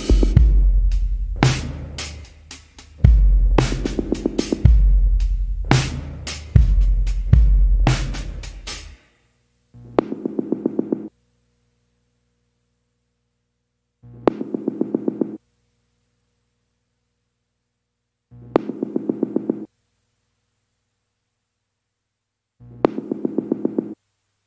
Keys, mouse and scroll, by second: 8.9 scroll down 1, 9.4 scroll up 1, 10.8 scroll down 1, 12.0 scroll up 1, 14.9 scroll down 1, 15.5 scroll up 1, 18.5 scroll down 1.